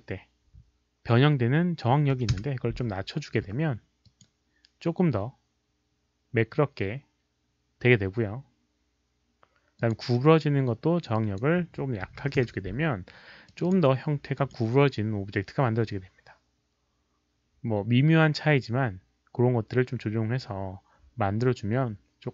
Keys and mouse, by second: 2.1 click, 2.1 KP_1, 2.3 Return, 4.0 click, 9.7 click, 11.1 click, 11.3 Return, 11.3 KP_1, 12.1 KP_Decimal, 12.2 KP_1, 12.4 Return, 12.4 click, 13.4 click, 14.3 click, 20.2 click, 20.5 Return, 20.5 click, 20.5 KP_1, 20.5 KP_Decimal.